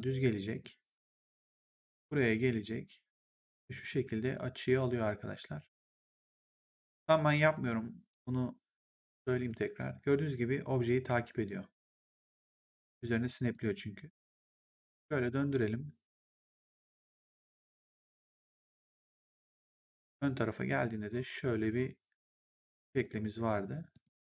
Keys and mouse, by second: 3.7 click, 7.3 click, 13.4 click, 17.0 click, 18.2 click, 21.5 click.